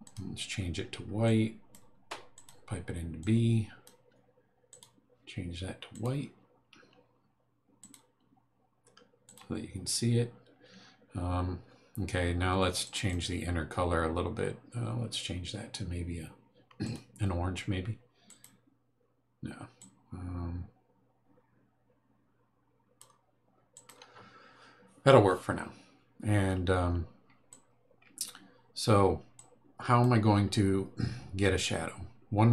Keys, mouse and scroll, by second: 0.0 click, 1.2 click, 2.3 click, 3.2 click, 4.7 click, 5.9 click, 7.8 click, 9.2 click, 12.8 click, 16.8 click, 18.2 click, 19.8-23.2 drag, 23.7 click, 27.5 click, 29.3 click.